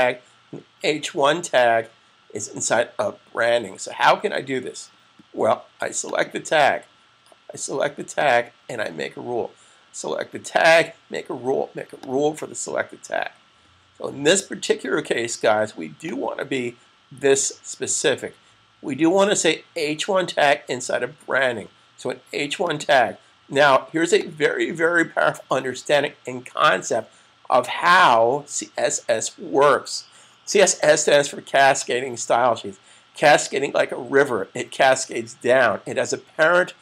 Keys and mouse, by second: 5.8 click, 11.8 click, 16.2 click, 22.4 click.